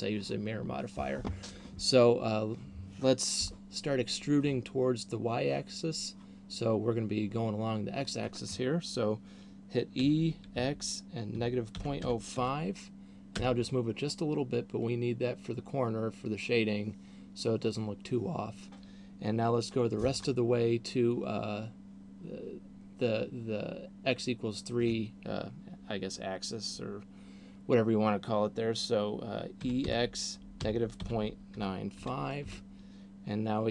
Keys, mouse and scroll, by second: 10.2 e, 29.7 e.